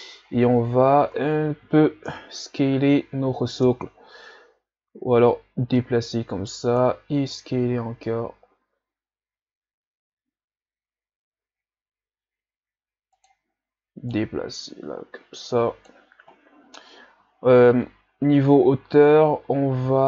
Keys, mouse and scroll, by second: 0.0 Tab, 0.6 a, 1.2 a, 2.1 KP_1, 3.6 KP_3, 5.3-7.4 drag, 7.4 s, 14.1-16.7 drag, 16.7-17.4 scroll up 2, 18.3 scroll up 1.